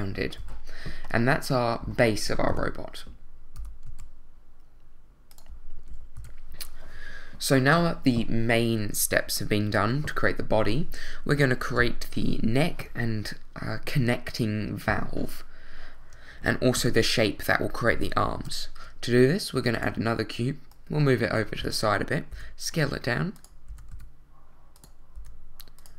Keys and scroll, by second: 0.4 z, 2.5 i, 3.6 g, 3.8 z, 6.1 a, 18.3 shift+a, 22.3 s, 23.7 s, 23.9 z, 25.1 s.